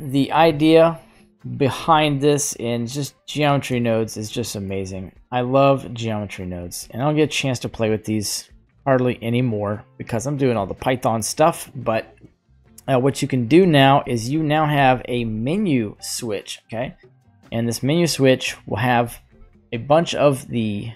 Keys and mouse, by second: 0.3 Delete, 0.8 right click, 1.0 Delete, 2.8 click, 3.7-4.2 shift+middle drag, 4.4 middle click, 5.9-6.2 right drag, 6.6-7.0 drag, 8.5 middle click, 13.9 shift+a, 17.2 typing, 17.6-20.9 drag.